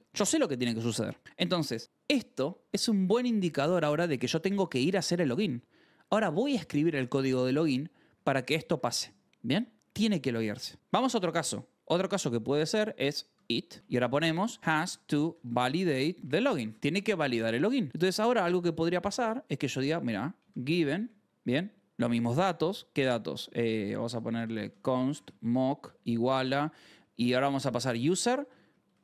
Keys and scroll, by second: 2.4-5.4 typing, 8.1-9.2 typing, 9.3 Escape, 10.8 j, 11.4 o, 11.9 Return, 12.7-18.8 typing, 20.1-21.4 typing, 21.7 Return, 22.5 Return, 23.1-29.0 typing.